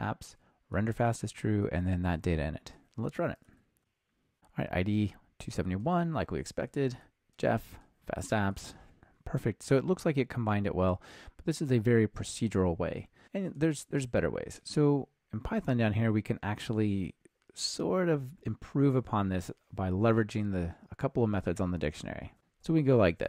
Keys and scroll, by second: 3.8 ctrl+r.